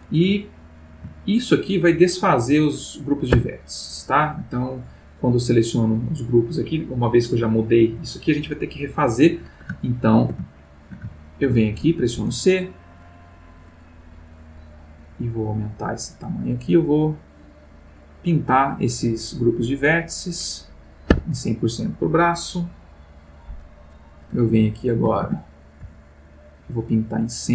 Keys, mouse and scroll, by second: 0.4 ctrl+middle click, 3.3 Tab, 5.2 click, 6.1 click, 9.8 ctrl+middle click, 10.6-11.7 ctrl+shift+middle drag, 12.2 c, 14.6-15.1 scroll up 2, 15.1-15.8 scroll down 2, 16.3-20.1 drag, 21.1 Escape, 22.2 click, 24.3 a, 25.8 c, 26.5-27.5 drag.